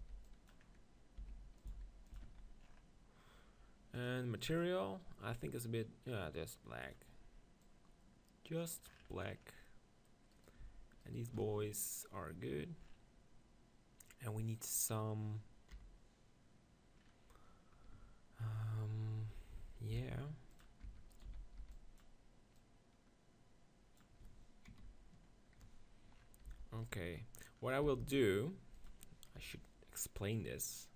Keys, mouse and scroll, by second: 0.0 b, 1.2 e, 1.7 s, 2.2 Tab, 2.2-8.8 drag, 2.3 z, 8.9-12.4 middle drag, 10.3-12.7 right drag, 12.6-15.4 middle drag, 12.8 right click, 14.8 right click, 15.7 KP_7, 17.4-19.9 middle drag, 19.9 shift+d, 20.8 Tab, 21.1-23.5 right drag, 21.3 z, 21.6 b, 22.6 click, 23.5 click, 25.2 KP_3, 26.2 middle click, 26.5 b, 27.8 s, 28.8-30.8 drag, 29.4 KP_7, 30.3-30.9 right drag.